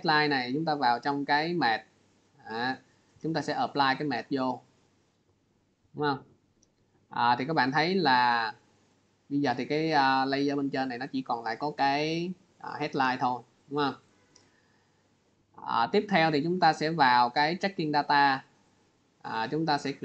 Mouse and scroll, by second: 1.4 click, 3.6 click, 8.4 click, 13.9 click, 14.9 click, 15.7 click, 17.6 click.